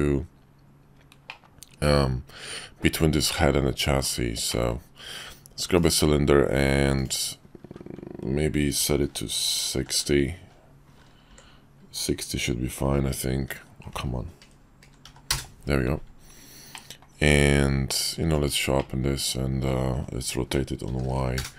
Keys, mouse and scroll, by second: 1.2-2.8 middle drag, 3.3-4.1 middle drag, 4.5 middle click, 6.9-16.2 drag, 16.7-17.1 middle drag, 17.3 q, 18.8 click, 19.9 r.